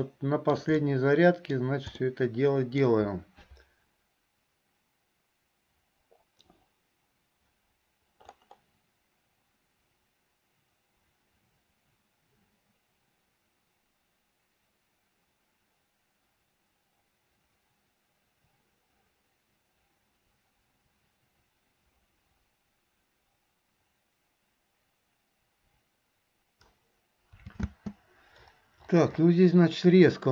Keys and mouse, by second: 0.2 shift+middle click, 1.0 middle click, 2.1 middle click, 27.6 space.